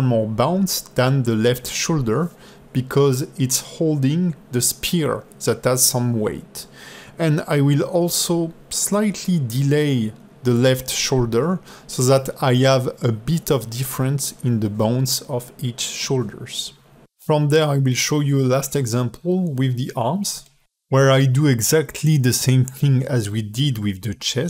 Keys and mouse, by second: 1.9 click, 2.2 click, 2.5 click, 3.2-5.7 drag, 7.5 ctrl+Tab, 7.8 click, 8.0 click, 8.2 click, 8.4 click, 8.6 drag, 10.1 alt+middle click, 10.7 g, 12.3 alt+middle click, 12.8 space, 13.3 ctrl+Tab, 13.5 click, 14.1 shift+click, 14.4 q, 18.6 space, 21.0 click, 21.1 ctrl+Tab, 21.3 click, 21.6 click, 22.6 click, 23.1 click, 23.7 click.